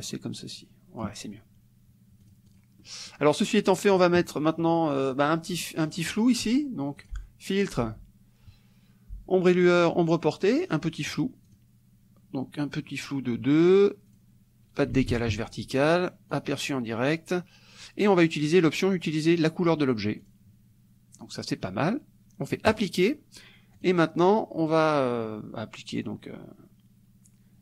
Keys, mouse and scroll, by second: 2.3 click, 2.9 middle click, 3.7 click, 4.4 middle click, 5.7 middle click, 7.0 click, 9.9 click, 10.7 click, 11.5 click, 14.1 click, 15.0 ctrl+a, 15.2 ctrl+KP_0, 16.3 click, 17.8 click, 20.3 click, 22.7 click, 23.8 click.